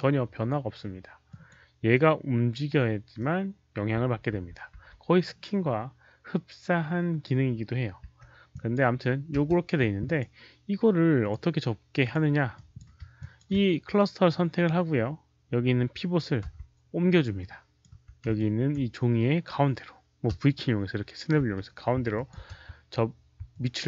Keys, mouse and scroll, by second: 0.0-1.2 typing, 1.2 alt+click, 1.2 alt+right click, 1.8-3.1 middle drag, 2.9-4.7 typing, 3.1 alt+click, 3.1 alt+right click, 6.5 click, 6.5 alt+right click, 6.5 w, 8.2-13.2 typing, 8.4 click, 8.4 middle click, 10.0 click, 10.0 middle click, 11.1 click, 11.2 middle click, 11.9 click, 11.9 middle click, 12.4 click, 13.1 ctrl+click, 16.3 d, 17.3 ctrl+click, 17.9 4, 18.3 ctrl+alt+click, 19.9-22.4 typing, 20.1 ctrl+click, 20.4 middle click, 21.2 ctrl+click, 22.0 ctrl+alt+click, 23.4-23.8 ctrl+alt+drag.